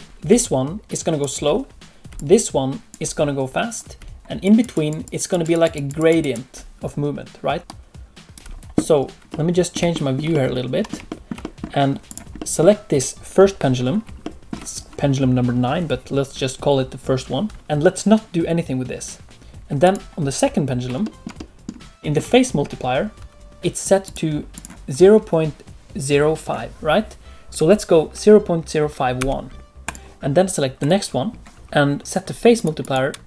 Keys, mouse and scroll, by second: 0.2-6.2 typing, 0.4 click, 2.1 click, 4.4 click, 4.7 click, 5.0 click, 5.3 click, 5.5 click, 5.7 click, 5.9 click, 6.2 click, 7.6 right click, 8.3 d, 9.3 middle click, 9.3 d, 9.9 shift+middle click, 10.3 middle click, 11.0 shift+middle click, 11.4 middle click, 12.0 click, 12.3 middle click, 14.2 shift+middle click, 17.5 alt+a, 17.5 click, 19.8 click, 20.6 scroll up 1, 21.0 shift+middle click, 21.3 middle click, 22.0 shift+middle click, 24.0 click, 30.2-30.7 scroll down 1, 30.7 click, 30.7 middle click, 32.0 click, 32.5 click.